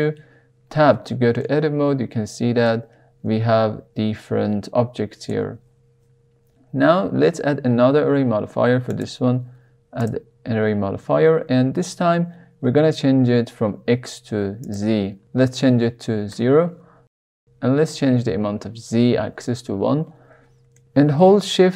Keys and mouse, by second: 1.4-2.6 middle drag, 5.3 Tab, 10.0 click, 14.6-17.0 drag, 17.6 click, 18.9-19.4 middle drag, 20.7 middle click.